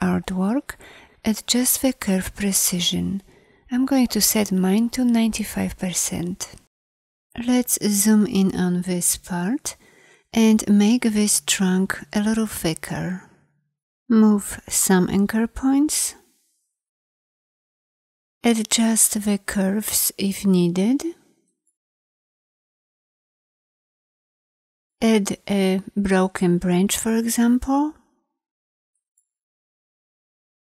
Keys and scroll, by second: 7.6 z, 12.8 a, 18.6 shift+c, 24.9 a, 29.7 a.